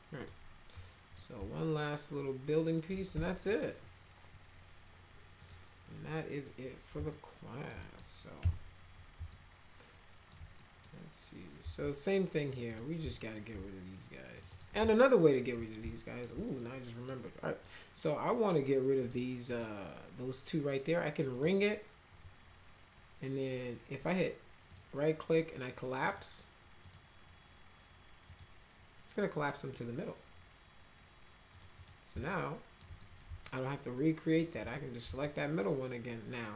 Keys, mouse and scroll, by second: 0.2 click, 1.2-2.9 alt+middle drag, 3.2 middle click, 5.4 click, 7.1 alt+middle click, 7.8 middle click, 8.4 F4, 9.3-10.3 alt+middle drag, 10.5 middle click, 12.5 click, 12.7 click, 13.1 alt+middle click, 14.3 ctrl+click, 14.5 ctrl+middle click, 14.9 alt+middle click, 15.9 alt+middle click, 16.6 middle click, 19.0 click, 19.5 click, 21.3 click, 24.7 right click, 26.1 click, 26.8 right click, 28.3 click, 28.9-29.7 scroll up 2, 31.5 click, 31.7 click, 32.3 alt+middle click, 33.0 middle click, 33.4-34.5 alt+middle drag, 35.2-36.5 alt+middle drag.